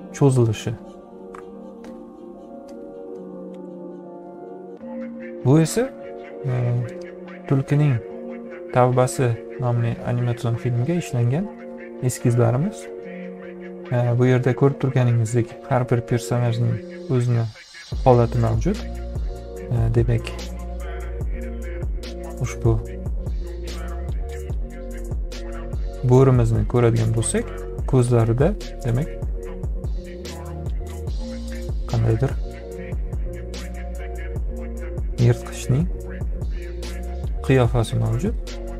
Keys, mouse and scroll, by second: 0.0 ., 18.4-20.1 drag, 37.8-38.7 drag.